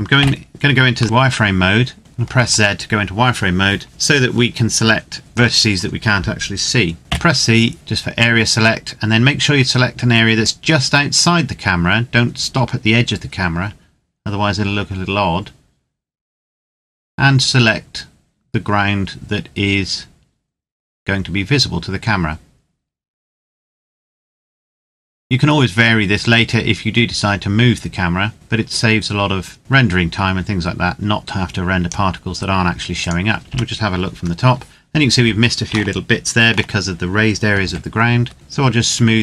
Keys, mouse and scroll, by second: 0.9 shift+middle click, 1.0 scroll up 1, 1.5-1.9 scroll down 1, 2.0 shift+middle click, 7.0 c, 7.5-9.0 scroll down 1, 10.2 click, 32.7 right click, 33.4 KP_7, 34.1-35.5 scroll down 1, 35.8 shift+middle click, 37.7 c, 38.2-39.2 scroll up 1.